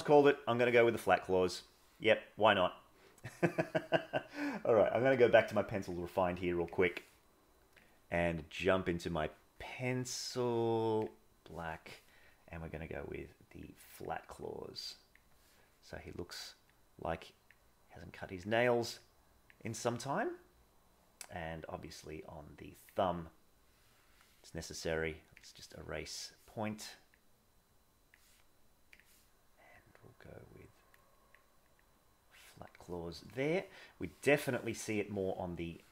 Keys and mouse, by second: 0.6-2.2 middle drag, 2.9 middle click, 7.8 click, 12.8 click, 13.8 click, 14.5 click, 16.6 click, 18.0 click, 18.9 click, 21.7-22.9 drag, 23.6 middle click, 27.2 click, 29.8-30.9 drag, 31.7 click, 32.4 click, 33.8 middle click, 35.8 middle click.